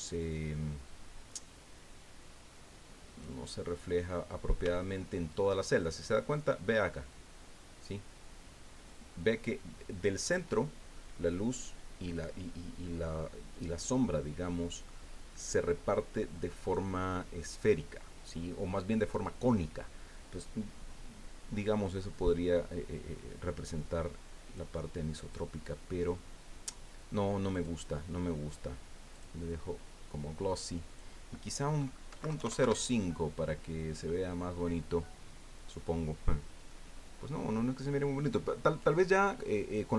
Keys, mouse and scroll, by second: 0.9-3.4 drag, 3.7 scroll down 2, 4.7-7.3 shift+middle drag, 24.5-25.5 drag, 27.5 click, 29.1 click, 30.9 click, 32.1 KP_Decimal, 32.3 KP_0, 32.3 KP_5, 32.6 KP_Enter, 36.0 scroll down 2, 36.7-38.3 drag, 38.3 middle click, 38.7 scroll up 1, 39.6 scroll down 1.